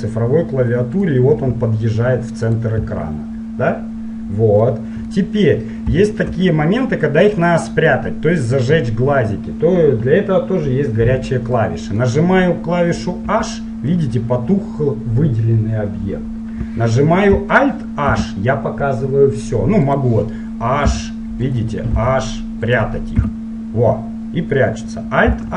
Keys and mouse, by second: 1.3-4.4 drag, 4.5 middle click, 5.4 middle click, 6.1-11.4 middle drag, 11.7-13.2 middle drag, 13.3 click, 13.3 h, 18.2 alt+h, 20.0-24.5 drag, 21.0 h, 22.1 h, 23.3 h.